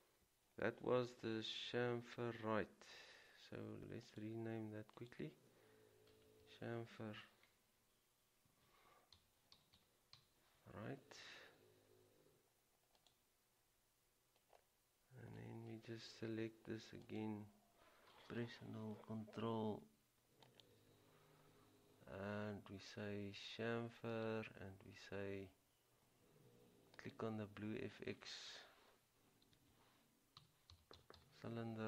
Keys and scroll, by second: 8.6-10.8 typing, 29.7-31.6 typing.